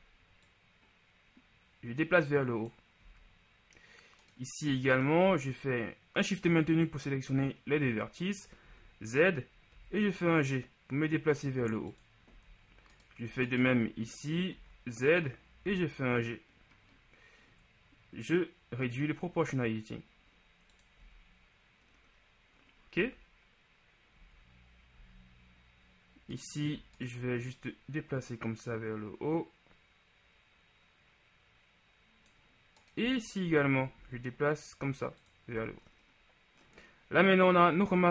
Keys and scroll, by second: 3.2 z, 8.8 z, 12.4 z, 14.6 z, 21.1 z, 34.0 shift+g, 35.6 z.